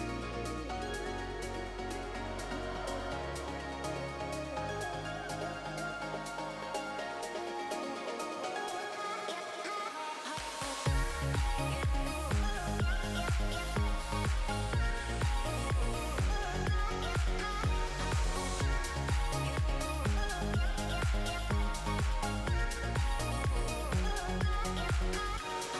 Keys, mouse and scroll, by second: 0.1 click, 3.1 middle click, 3.7 shift+middle click, 4.6 middle click, 5.3 scroll up 1, 5.4 middle click, 6.2 shift+middle click, 6.4 middle click, 6.9 middle click, 7.8 shift+d, 9.0 middle click, 10.3 click, 11.5 middle click, 12.2 click, 12.9 middle click, 13.6 scroll down 3, 13.8 shift+middle click, 14.0 middle click, 14.8 scroll up 2, 15.0 shift+middle click, 15.5 scroll up 1, 15.7 middle click, 16.2 middle click, 17.1 shift+d, 18.4 middle click, 20.1 alt+z, 20.5 shift+middle click, 20.7 middle click, 22.2 click, 22.6 middle click, 24.1 shift+scroll up 1, 24.1 shift+middle click, 24.3 shift+middle click, 25.1 r.